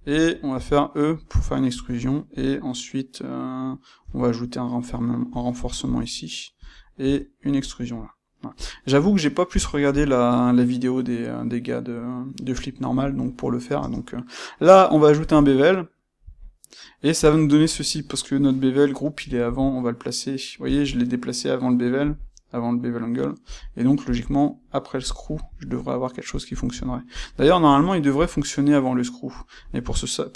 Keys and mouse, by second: 0.5 e, 1.7 click, 4.0 e, 6.7 click, 6.9 e, 8.6 click, 8.9 Tab, 9.9 click, 13.7 space, 15.6 space.